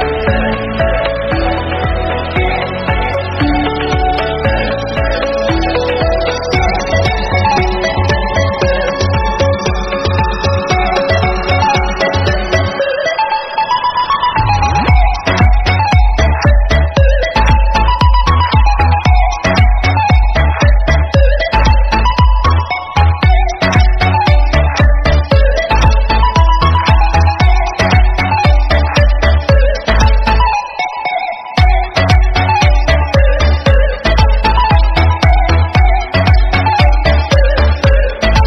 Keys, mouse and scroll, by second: 0.9 scroll down 4, 1.0 middle click, 1.7 Tab, 1.9-2.4 scroll down 2, 1.9 middle click, 2.4-3.2 scroll up 4, 3.2 drag, 4.4 click, 5.0 click, 6.4 scroll down 2, 6.6 shift+middle click, 6.7 scroll up 2, 6.9-7.3 shift+middle drag, 7.3 Tab, 8.2 click, 8.3 click, 9.2 shift+click, 9.5 middle click, 10.1 KP_Add, 10.3-11.4 middle drag, 11.4 drag, 11.7 click, 11.9 click, 12.4 Tab, 12.4 middle click, 13.1 click, 14.1 click, 14.4 click, 14.6-15.4 scroll down 5, 15.4 click, 15.9-16.3 scroll down 1, 16.3 alt+h, 16.4 scroll down 1, 16.7 click, 16.9 KP_3, 17.6 scroll down 2, 17.8 shift+middle click, 17.9 scroll up 3, 18.2 g, 19.4 r, 20.2 scroll down 3, 20.5 scroll up 3, 20.8 s, 21.7 r, 22.7 KP_0, 23.5 drag, 26.5 click, 26.8 shift+a, 27.6 s, 29.8-30.8 middle drag, 30.8 click, 31.0 shift+middle click, 31.4 ctrl+r, 32.0 click, 32.1 Tab, 32.5 ctrl+r, 34.8 scroll up 3, 34.9 shift+middle click, 35.4 ctrl+b.